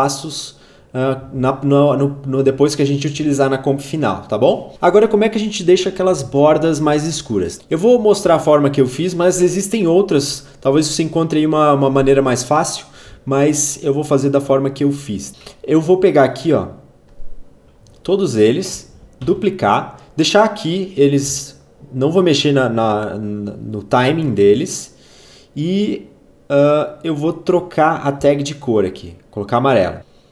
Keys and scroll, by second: 8.3 ctrl+a, 19.2 ctrl+d.